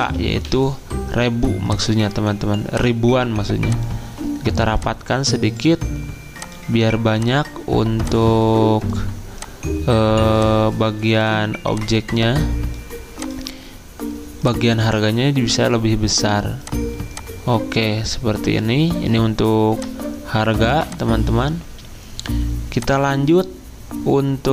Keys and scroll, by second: 0.0 Caps_Lock, 0.5 k.